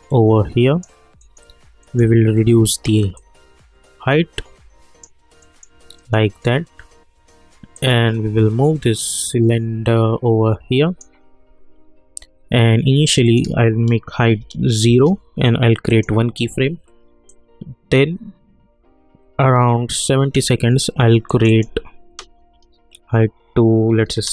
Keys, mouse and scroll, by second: 1.2 middle click, 3.1-5.4 drag, 5.4 middle click, 7.7-13.1 drag, 14.8 Return, 15.9-21.3 drag.